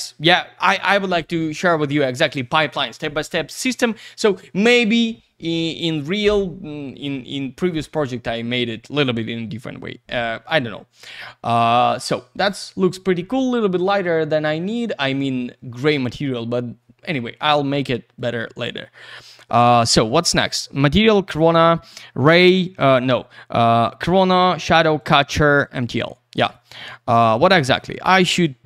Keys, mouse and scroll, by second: 9.5 click, 18.2 click, 19.3 right click, 19.8 click, 25.0 click, 26.5 click, 27.2 click, 28.2 click.